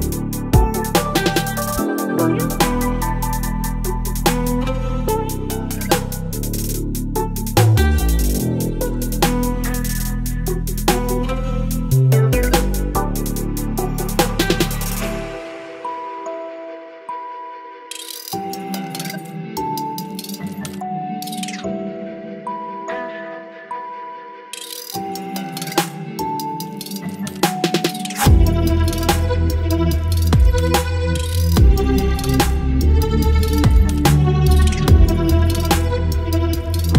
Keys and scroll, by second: 1.5-7.3 typing, 8.7 space, 10.3-12.6 typing, 14.0 space, 14.9 space, 15.6 space, 16.4 space, 17.4 space, 18.1 space, 19.6 space, 20.5 space, 21.3 space, 22.4 space, 23.0 ctrl+z, 23.1 ctrl+space, 23.6 space, 24.2 space, 25.6 space, 25.8 ctrl+z, 25.9 space, 26.1 space, 26.3 space, 27.8 space, 28.3 space, 30.5 space, 30.9 e, 31.2 [, 32.7-35.6 typing, 36.2 ctrl+z.